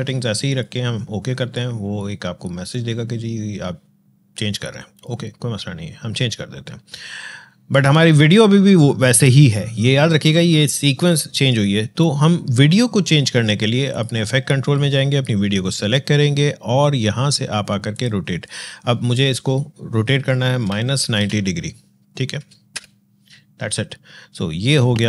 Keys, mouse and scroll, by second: 0.3 click, 4.7 click, 7.5 click, 13.7 click, 24.9-25.0 drag.